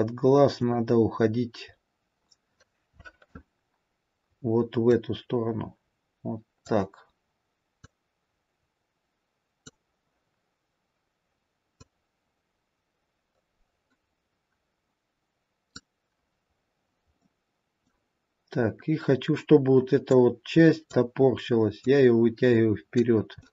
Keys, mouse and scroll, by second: 1.8-2.3 scroll up 3, 3.6-5.3 scroll down 2, 5.3 click, 8.2 click, 12.1 click, 16.4-17.4 scroll down 1, 17.4 middle click, 17.4-18.8 scroll down 2, 18.8-19.3 scroll up 1, 20.5 click, 22.2 click.